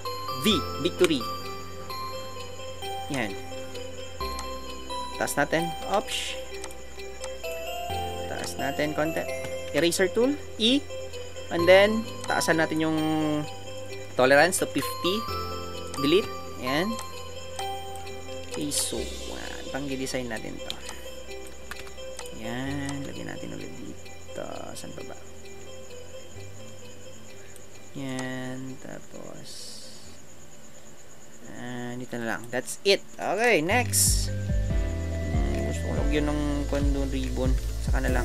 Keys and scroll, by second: 9.8 e, 14.6 KP_0, 14.8 Return, 33.2 Right, 36.7 alt+Tab.